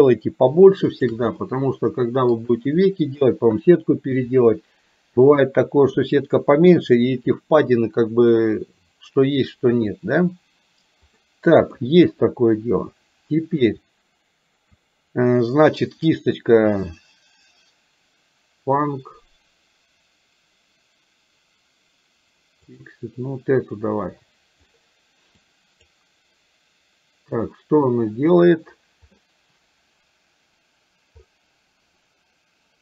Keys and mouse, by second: 1.6 middle click, 11.2 middle click, 22.8 click, 25.4 click.